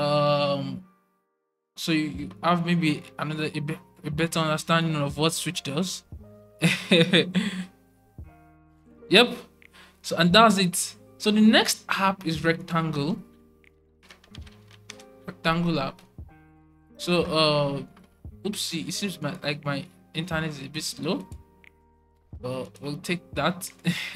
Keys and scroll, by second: 12.6-14.8 typing.